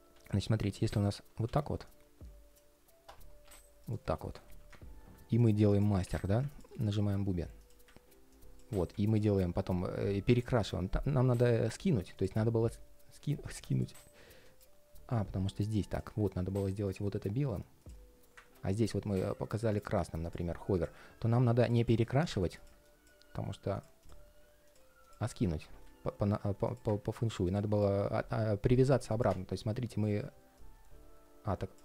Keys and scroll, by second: 25.4 super+z.